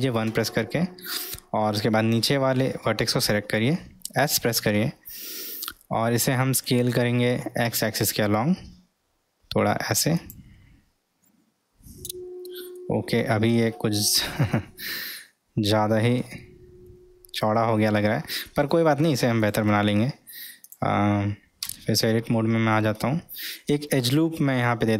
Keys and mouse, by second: 0.3 1, 1.3-1.8 drag, 4.1 s, 11.3-12.9 middle drag, 13.9 Tab, 16.9 alt+z, 18.0-19.0 middle drag, 19.4 click, 20.6 click, 21.7 Tab, 22.2 middle click.